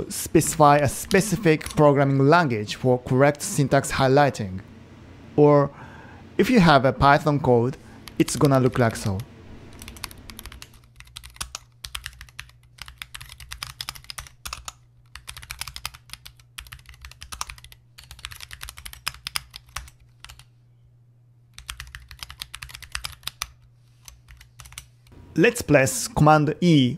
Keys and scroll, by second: 0.0-1.0 typing, 1.1 super+Down, 1.7 Return, 8.5-23.1 typing, 24.3 Page_Down, 24.5-25.2 typing.